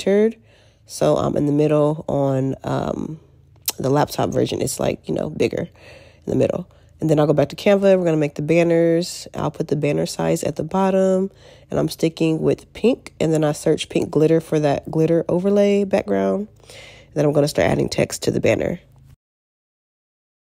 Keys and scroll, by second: 17.4 alt+q.